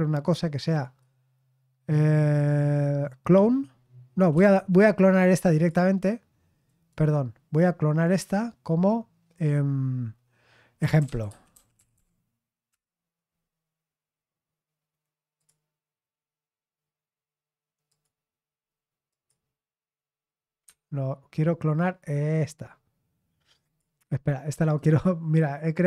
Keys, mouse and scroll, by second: 0.7-4.3 right drag, 4.3 Escape, 4.6 right click, 5.5 click, 6.6-8.5 drag, 10.7-12.4 typing, 12.6 Return, 15.3 click, 17.8 click, 19.0 click, 20.6 Escape, 22.4 click, 23.6 click, 24.5-25.8 right drag.